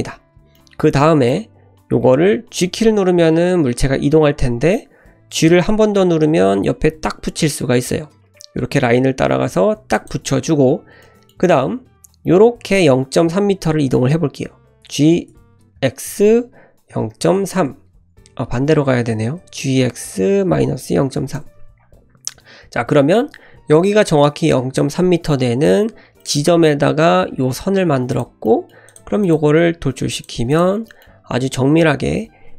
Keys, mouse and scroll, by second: 0.5-1.5 middle drag, 2.7 g, 11.0-12.9 middle drag, 15.3 g, 19.1 ctrl+z, 19.1 g, 22.5-23.6 scroll up 1, 25.6 3, 26.2-28.1 middle drag, 28.1 click, 28.4 middle click, 28.9 click, 29.2 click, 29.5 e, 30.3 Tab, 30.5 click, 30.9 middle click.